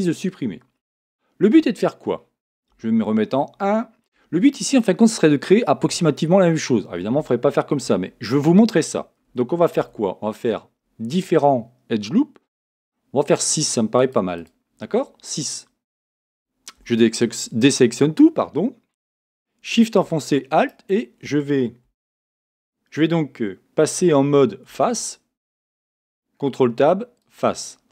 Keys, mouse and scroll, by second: 2.7 a, 7.8 a, 9.8 ctrl+r, 14.4-16.4 drag, 15.4-17.4 middle drag, 16.8 a, 20.6-22.3 right drag, 21.8 a, 24.7 ctrl+Tab.